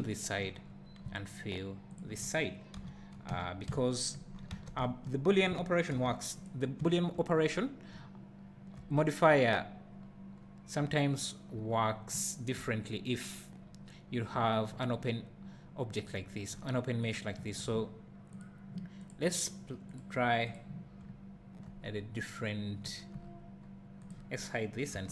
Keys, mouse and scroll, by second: 0.8-1.2 scroll down 1, 2.0 alt+click, 2.8 f, 3.3 Tab, 4.3 scroll up 1, 4.5 alt+a, 5.9 alt+h, 6.5 click, 6.8 `, 7.4 scroll up 1, 7.9 `, 8.9 scroll up 1, 10.0 scroll down 2, 10.3 scroll up 1, 10.8 `, 11.7 scroll down 1, 12.1 `, 12.8-13.3 scroll up 1, 13.3-14.1 scroll down 1, 14.3 `, 17.1 click, 17.4 `, 19.1 click, 20.5-24.1 drag, 21.0 `, 21.8-22.8 scroll up 2, 22.8 `, 23.2-23.6 scroll down 1, 23.6 scroll up 1, 24.3-24.8 scroll down 1, 24.9 h.